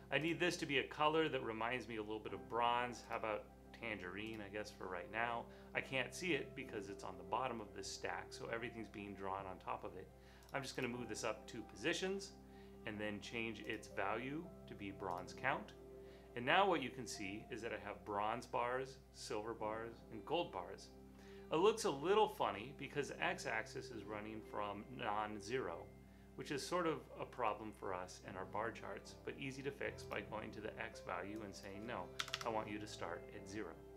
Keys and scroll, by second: 32.2 typing.